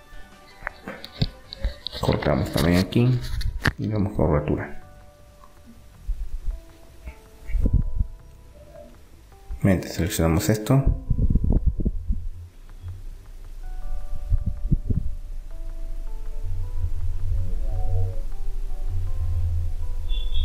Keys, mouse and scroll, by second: 0.7 ctrl+r, 3.1 g, 5.7 r, 8.2-11.0 drag, 11.0 middle click, 11.2-14.2 drag, 14.5-16.5 drag, 16.0 r, 18.2 middle click.